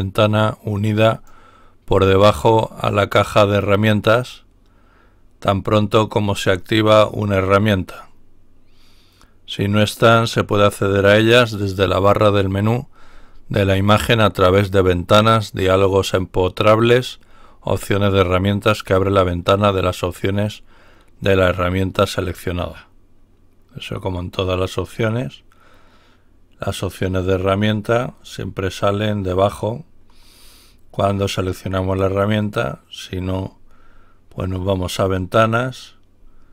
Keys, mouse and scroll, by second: 1.0 click, 24.7 click, 34.8 click.